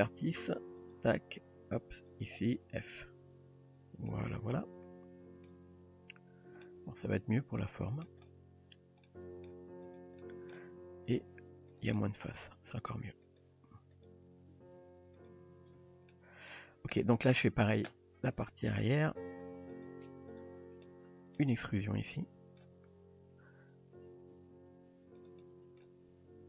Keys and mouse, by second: 2.0 click, 3.4 f, 4.1-5.5 middle drag, 5.8 Tab, 6.6-8.1 middle drag, 8.7 Tab, 9.1-9.5 middle drag, 10.2-10.5 middle drag, 11.2 r, 12.0 middle click, 12.7 g, 13.9 click, 14.5 g, 15.8 Tab, 16.1-16.5 middle drag, 17.0 shift+middle drag, 18.6 Tab, 19.8 click, 20.3 click, 20.9-21.4 middle drag, 21.7-22.7 middle drag, 24.5 e, 25.4 middle click, 26.1 r.